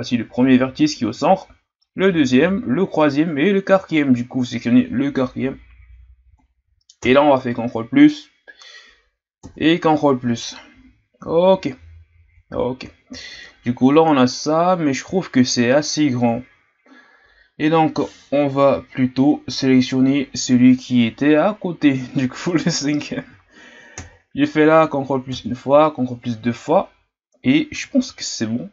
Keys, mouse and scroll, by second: 5.7-7.0 scroll down 2, 7.0 ctrl+KP_Add, 9.4 ctrl+KP_Add, 22.5 right click, 24.0 ctrl+KP_Add, 25.3 ctrl+KP_Add.